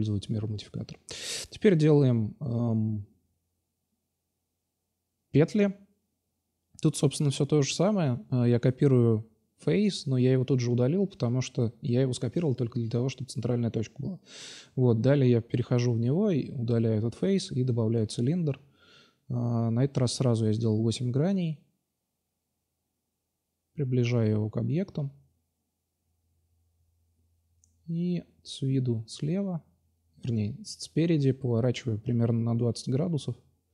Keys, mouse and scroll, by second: 0.7 x, 2.8-4.1 middle drag, 3.1 shift+a, 4.9 click, 6.4-7.9 drag, 7.9 middle click, 8.1-8.9 drag, 8.9-9.2 middle drag, 10.3-11.7 drag, 12.4-13.1 drag, 13.1 middle click, 13.6 click, 14.3 r, 16.0 s, 16.6 s, 17.8 s, 20.4 click, 21.5-24.4 drag, 25.8-26.6 middle drag, 28.0 q, 28.6 q, 30.0 r.